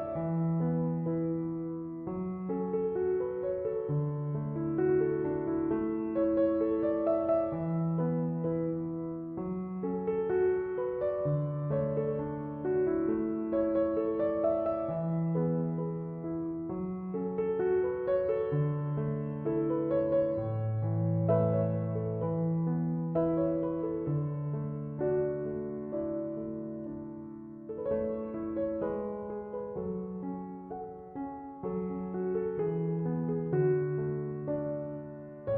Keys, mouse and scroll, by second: 7.5 Return, 18.1 1, 18.3 8, 18.5 0, 18.8 Return, 29.4 c, 29.5 o, 29.7 m.